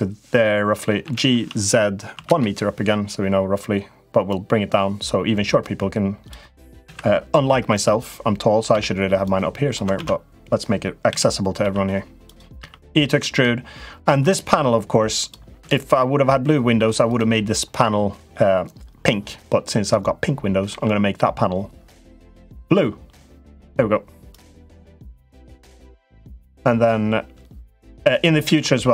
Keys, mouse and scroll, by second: 0.8 g, 4.1-6.1 drag, 6.6 s, 9.0 click, 9.7 ctrl+z, 10.8 s, 12.3 e, 20.5 g, 23.4 click, 24.4 l, 25.1-28.0 drag.